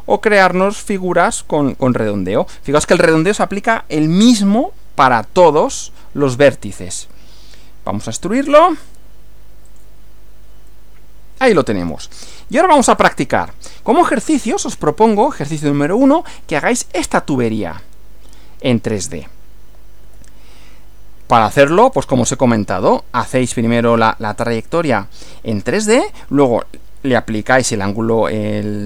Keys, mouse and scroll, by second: 8.2 click, 9.7 click, 10.7-12.1 middle drag, 13.0 click, 20.1 Right.